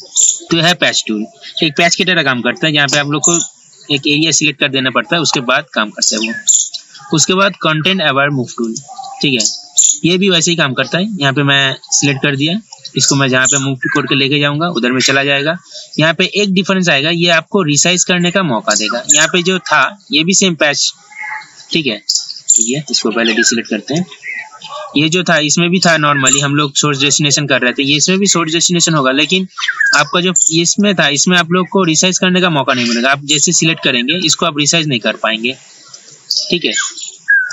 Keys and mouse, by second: 2.2 ctrl+z, 2.7 ctrl+z, 3.0 ctrl+z, 3.5 ctrl+z, 6.2 right click, 8.7-14.6 drag, 19.9 right click, 23.2 ctrl+z, 24.1 d, 25.4 right click, 28.3 click, 30.0 right click, 30.8-34.6 drag, 36.1 ctrl+t.